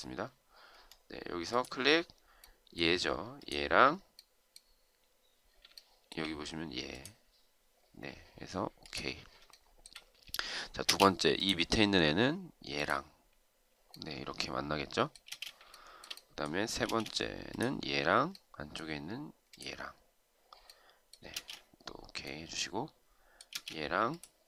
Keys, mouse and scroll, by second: 5.5 shift+right click, 9.3 shift+right click, 10.7 space, 15.1 space, 15.5 shift+right click, 16.6 space, 21.1 space, 23.3 space.